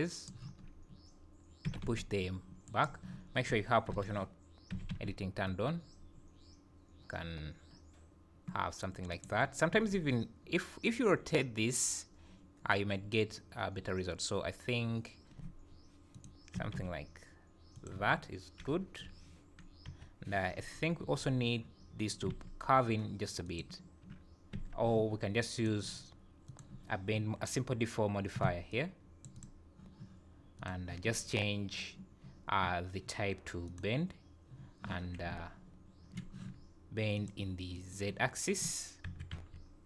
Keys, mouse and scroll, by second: 0.6-1.1 scroll up 1, 1.7 g, 3.9 o, 4.7 g, 9.7 r, 16.5 g, 18.0 Tab, 18.8 KP_1, 19.9 KP_7, 20.6 scroll up 1, 21.0 Tab, 22.3 alt+a, 23.4 alt+click, 24.5 Tab, 25.6 click, 26.5 click, 30.6 click, 33.7 click, 37.1 click, 39.0 KP_1, 39.3 KP_7.